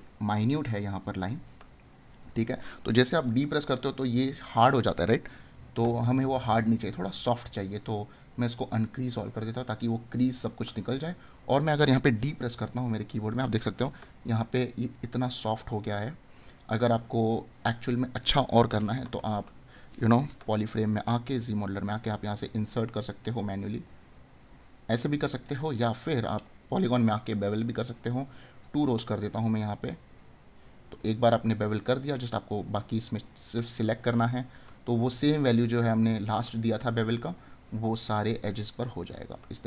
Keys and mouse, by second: 1.5 right click, 10.5 right click, 14.3 right click, 16.8 right click, 19.5 right click, 33.5 right click, 35.9 right click, 38.7 right click.